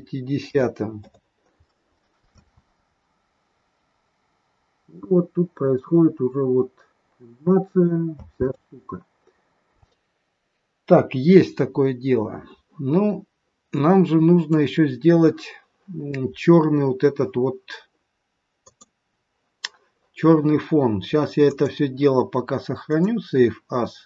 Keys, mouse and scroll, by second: 2.4 space, 6.3-7.3 scroll up 1, 7.3 scroll down 1, 7.5 scroll down 1, 8.2 space, 9.8-10.3 scroll up 1, 11.4-12.9 scroll down 1, 13.0 scroll down 2, 13.7 middle click, 18.6 click, 21.5 click.